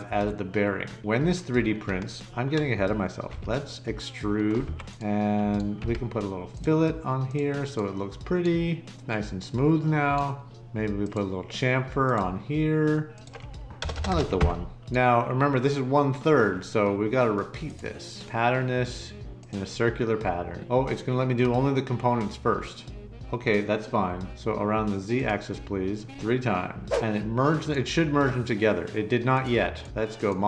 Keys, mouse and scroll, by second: 3.2 e, 4.6 Escape, 5.8 f, 13.8 BackSpace, 14.1 BackSpace, 14.2 1, 14.3 Return, 17.6 click, 19.4 click, 30.1 click.